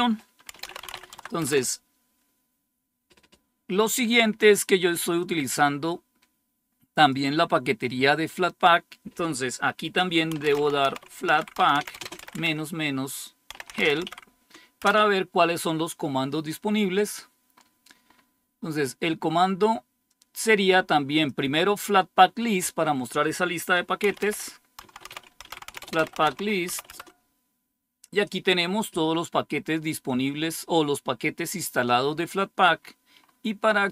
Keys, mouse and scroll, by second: 0.2-1.3 typing, 5.1-7.7 drag, 10.0-14.4 typing, 14.7 Return, 16.8-18.7 scroll up 1, 17.4 typing, 20.1-21.9 drag, 23.7-27.1 typing, 32.1-33.9 scroll up 1.